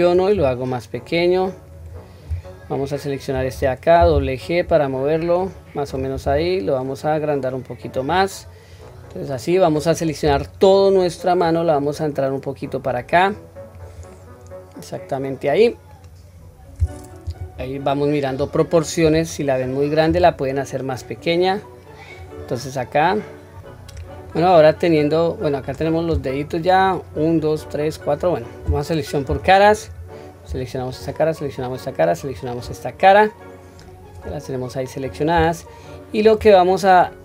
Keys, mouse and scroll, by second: 0.3 s, 2.6 alt+click, 4.0 g, 8.4-9.7 scroll down 2, 8.9 middle click, 10.2 a, 11.4-13.8 drag, 14.1-15.9 middle drag, 16.3-17.1 scroll down 1, 17.1-18.4 scroll down 2, 17.3 KP_1, 18.4 scroll down 1, 19.5-20.0 scroll up 3, 20.0 s, 23.0 click, 24.3-25.7 middle drag, 26.6 middle click, 29.3 3, 29.7 click, 30.8 shift+click, 31.4 shift+click, 32.2 shift+click, 33.1-34.2 middle drag, 34.6-35.1 scroll down 2, 35.0 scroll up 1, 35.6-36.2 shift+middle drag, 36.7 scroll up 1, 37.1 middle click.